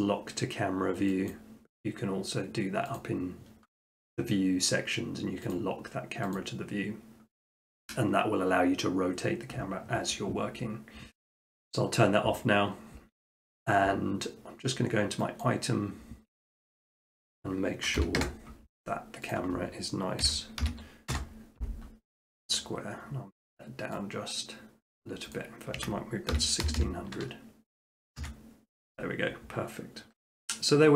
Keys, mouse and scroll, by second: 1.3-2.4 drag, 3.0-4.1 drag, 5.6 click, 15.4 click, 17.2 click, 18.0 0, 18.2 Return, 19.4-20.4 drag, 20.2-21.1 typing, 25.0 click, 25.4 click, 25.8-26.7 typing, 28.2 Return.